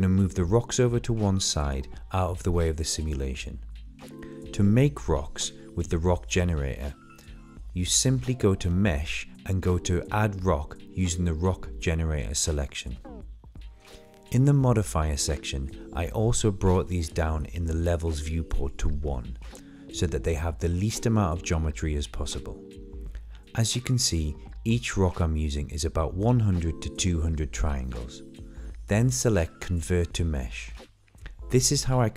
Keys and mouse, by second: 2.4 shift+click, 2.9-3.3 middle drag, 4.3 click, 6.3 middle drag, 6.6 shift+middle click, 8.2 middle click, 8.6 middle drag, 9.0 shift+middle click, 9.2 middle drag, 9.6 click, 9.9 click, 10.3 click, 10.5 middle click, 11.2 shift+d, 11.8 ctrl+z, 13.0 middle click, 14.0 middle click, 14.9 middle click, 15.4 middle click, 16.0 click, 17.1 click, 18.3 click, 18.9 click, 19.3 click, 20.6 click, 22.3 middle drag, 24.3 middle drag, 24.7 middle click, 25.0-25.4 right drag, 25.8 right drag, 26.2 middle click, 26.6 middle drag, 27.4 click, 27.7 shift+middle drag, 28.3 Delete, 28.5 Delete, 28.8 shift+middle click, 29.9 middle click, 30.7 middle click, 30.9 shift+middle click, 31.1 middle click, 32.0 click.